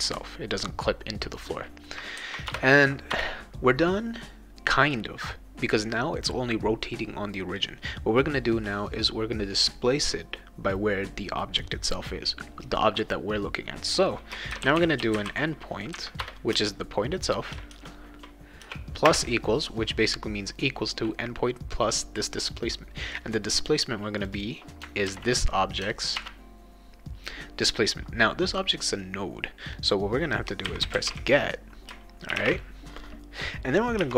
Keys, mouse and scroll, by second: 2.5 Return, 3.1 Return, 14.3-16.5 typing, 16.2 Return, 17.7 shift+-, 18.6 =, 19.0 space, 24.2 click, 25.1 ctrl+c, 25.3 click, 26.2 ctrl+v, 30.4-32.9 typing, 34.0 -.